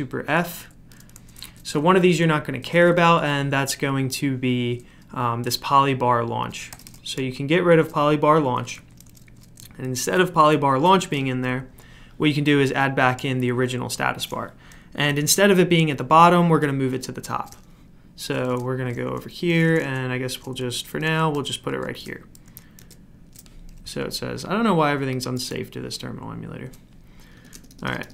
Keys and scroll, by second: 1.2-2.8 typing, 6.8 typing, 8.7 typing, 9.9 super+f, 18.7-21.3 typing, 21.7 Return, 22.8 ctrl+v, 27.4 Escape, 27.5 Escape, 27.7 Escape, 27.8 Escape, 28.0 Escape.